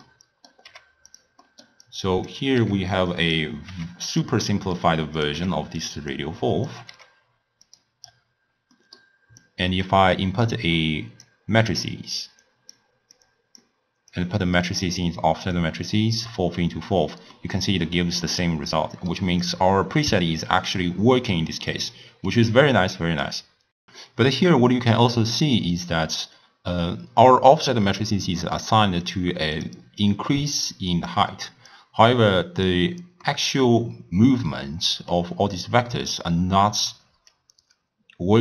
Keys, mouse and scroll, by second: 0.1 middle click, 0.7 g, 1.6 middle click, 2.0 click, 2.7 g, 3.8 g, 4.6-5.3 middle drag, 5.3 click, 5.5 g, 6.2 click, 7.0 g, 8.1-8.8 scroll up 1, 8.8 scroll up 3, 8.8-9.5 middle drag, 9.5 click, 10.6 drag, 11.8-13.3 drag, 14.2 drag, 15.6 click, 17.5-19.5 middle drag, 19.5-21.8 drag, 21.8-23.7 middle drag, 29.1 click, 30.1-33.2 drag, 33.3-36.3 middle drag, 37.3-38.4 drag.